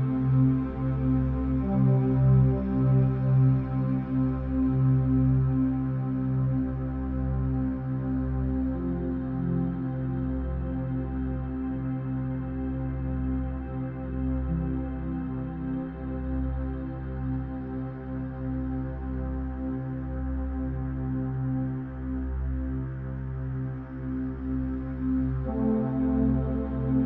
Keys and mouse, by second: 0.9 click, 1.9 F6, 2.9 click, 4.3 ctrl+click, 5.6 r, 9.2 r, 14.3 g, 18.5 click, 20.5 drag, 21.8 click, 22.7-23.5 drag.